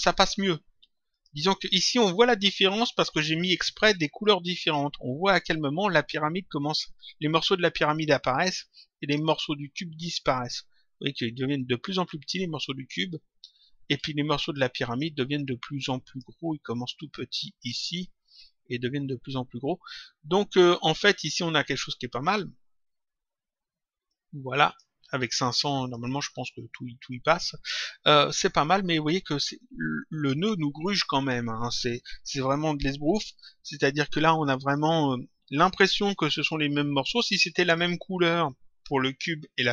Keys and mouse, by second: 1.0 click, 15.4 click, 20.6 click, 24.0 click, 25.2 click.